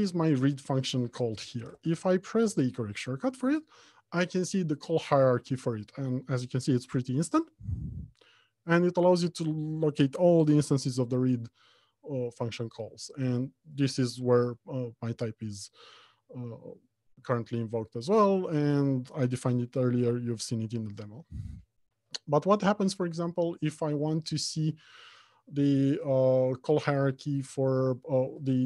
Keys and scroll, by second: 2.3 ctrl+h.